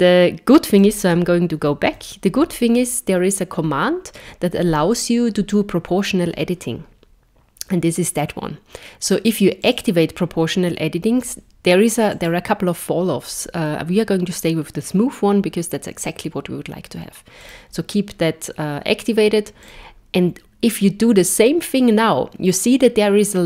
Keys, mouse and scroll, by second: 1.8 super+z, 9.6 click, 12.1 click, 20.8 click.